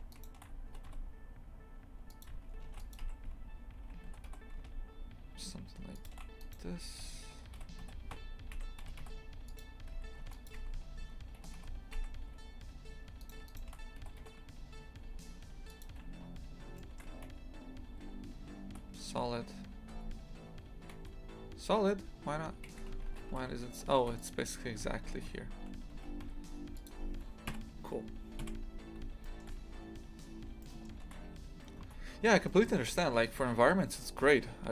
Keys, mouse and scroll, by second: 0.1 right click, 0.6 g, 2.6 ctrl+r, 4.0 g, 6.4 right click, 7.5 z, 8.8 g, 10.2 ctrl+r, 11.4 g, 13.2 right click, 13.4 right click, 14.0 g, 16.7 shift+middle click, 17.2 z, 18.0 z, 19.9 Tab, 20.9 z, 22.3 scroll down 1, 22.6 shift+f, 24.6 g, 27.5 KP_3, 28.4 KP_Decimal, 29.2 shift+middle click, 30.0 scroll up 1, 30.3 middle click, 31.7 middle click, 34.2 middle click.